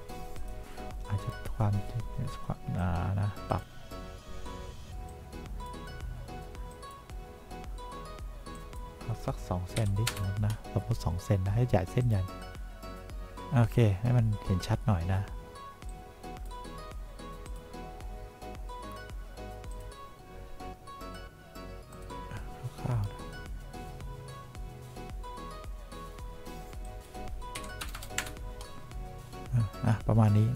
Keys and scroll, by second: 10.0 2, 10.4 Return, 27.9 1, 28.1 0, 28.5 Return.